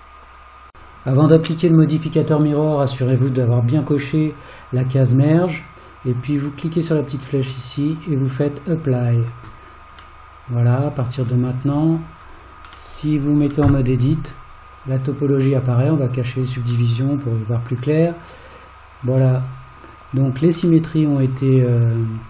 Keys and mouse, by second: 6.5-8.8 drag, 10.2-11.3 middle drag, 12.2 click, 13.0 middle click, 13.7 Tab, 16.1 click, 17.0-19.2 middle drag, 20.9-22.2 middle drag.